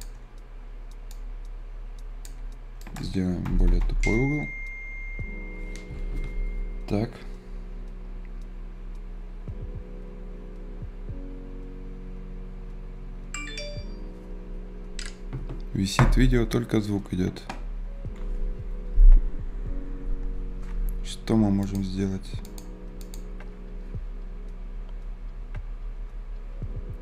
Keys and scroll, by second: 2.7 F10.